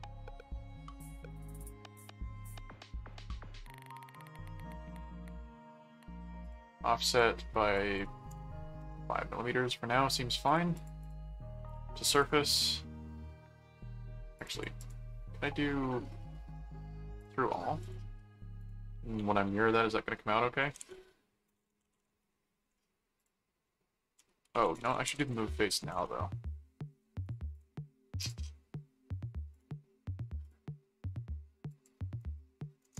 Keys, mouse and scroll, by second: 3.1 click, 6.4 click, 7.1 click, 7.7 click, 10.4 click, 11.7 click, 12.5 right click, 14.4 click, 17.2 click, 17.8 click, 18.6 click, 20.4-22.7 typing, 23.2 click, 23.7 middle click, 23.9-25.5 typing, 25.9 Return, 27.2 click, 28.2 click, 28.5 middle click, 29.5 click, 30.4 click, 31.7 click.